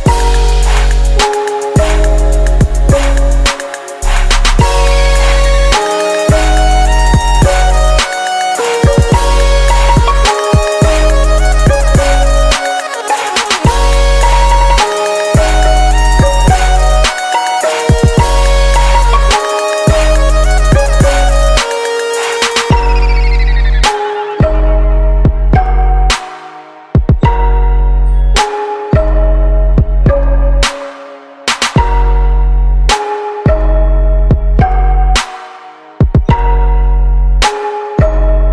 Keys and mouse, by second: 1.8-3.9 drag, 7.6 click, 9.4-11.2 drag, 14.2-17.1 drag, 17.5-19.4 drag, 19.5-21.3 drag, 24.3-26.9 drag, 28.0 click, 28.8 click, 29.7-32.1 drag, 33.3-35.1 drag, 35.6-37.7 drag, 38.1-38.5 drag.